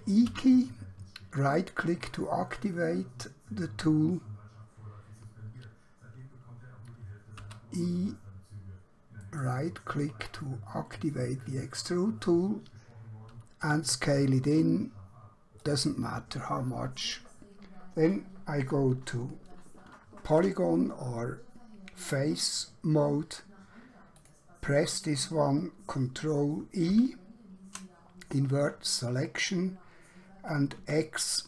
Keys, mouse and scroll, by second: 0.3 e, 1.5 right click, 7.5 e, 9.3 right click, 13.7 s, 15.7 click, 20.4 KP_3, 24.1 click, 26.9 ctrl+i, 30.9 x.